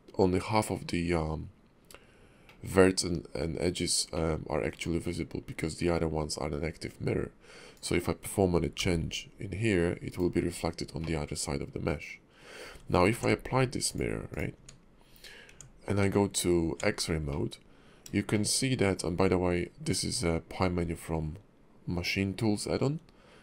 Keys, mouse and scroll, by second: 0.7-1.1 scroll down 3, 2.4 middle click, 4.1 middle click, 7.7 click, 8.8 g, 11.0 middle click, 12.6 Tab, 13.1 ctrl+`, 14.5 Tab, 15.0-15.5 scroll up 2, 15.5 Tab, 16.0 Tab, 17.3 middle click, 18.3 shift+middle click, 18.8 middle click, 19.2 Tab.